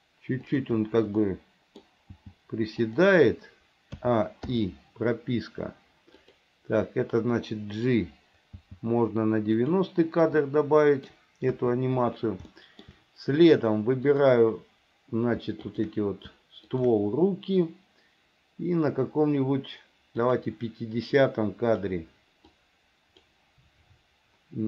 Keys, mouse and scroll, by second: 1.3 middle click, 2.2 g, 4.1 a, 4.6 i, 6.3 click, 8.7 g, 10.5 middle click, 11.7 KP_1, 12.6 shift+middle click, 14.3 click, 16.8 shift+click, 20.4 click, 21.3 click, 22.7 click.